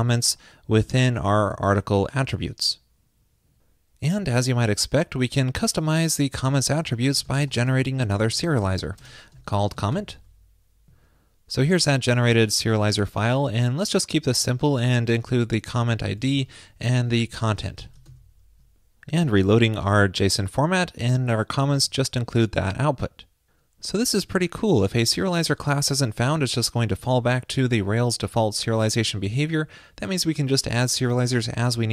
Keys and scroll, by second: 18.1 super+s.